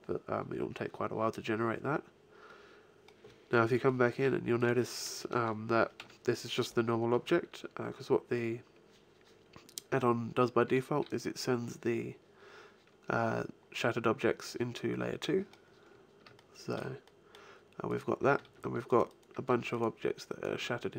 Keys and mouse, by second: 2.2-4.5 middle drag, 4.5-6.3 right drag, 5.9 g, 11.0-12.6 drag, 12.8-17.1 middle drag, 17.8 right click, 18.4 g, 19.3 g, 20.5 g.